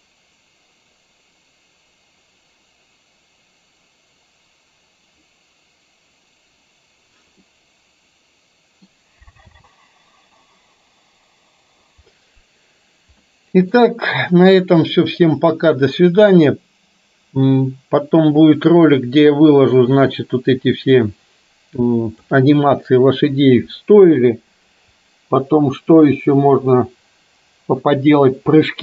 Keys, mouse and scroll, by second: 7.5-9.0 middle drag, 9.6 space, 13.5 middle click, 15.0-23.0 drag.